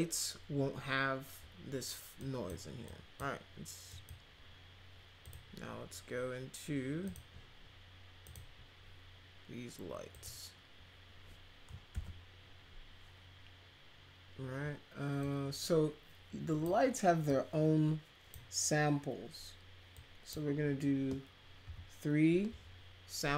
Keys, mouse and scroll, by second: 2.2 click, 2.8 click, 3.9 click, 5.2 click, 7.0 click, 8.2 click, 10.1 click, 11.9 ctrl+z, 15.2-16.6 drag, 17.2-18.3 drag, 19.9 click.